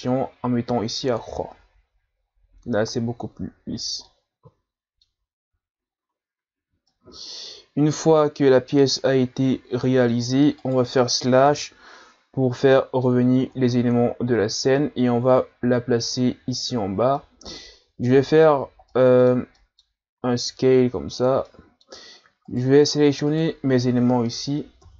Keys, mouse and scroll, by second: 4.0-5.7 middle drag, 5.7-6.6 scroll up 3, 6.6 a, 6.9-9.9 middle drag, 10.7 right click, 11.5 KP_Divide, 12.7-13.5 middle drag, 13.5-14.5 scroll up 3, 15.3-17.2 drag, 17.2 middle click, 17.8-18.5 scroll up 2, 18.9-20.2 middle drag, 20.2 s, 21.5-22.5 middle drag, 22.5 shift+right click, 23.3 shift+right click, 24.8 KP_Divide.